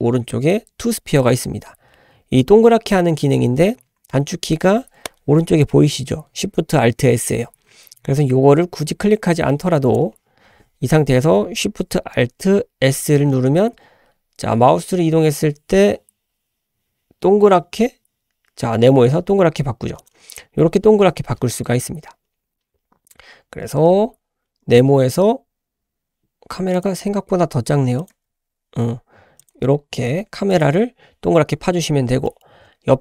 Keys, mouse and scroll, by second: 12.9 alt+shift+s, 15.9 s, 22.2-23.0 scroll up 2, 23.8 g, 28.1 g, 29.6 s, 30.1 g, 31.5-32.1 scroll down 2, 32.3 shift+middle click.